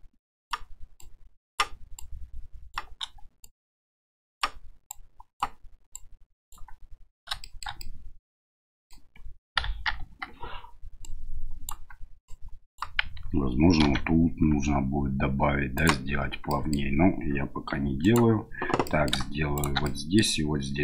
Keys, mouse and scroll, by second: 1.0 right click, 1.9 right click, 3.4-4.4 right drag, 4.9 right click, 5.9 right click, 7.4 shift+middle click, 7.8-8.9 middle drag, 9.6 KP_1, 10.0 KP_3, 11.0 right click, 12.2 right click, 13.8 ctrl+r, 16.6 middle click, 17.7 3, 18.0 right click, 18.8 middle click, 19.5 shift+right click, 19.8 middle click.